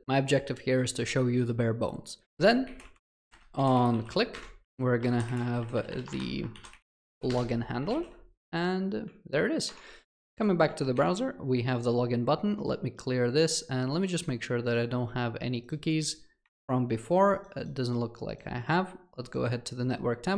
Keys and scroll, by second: 4.4 Escape.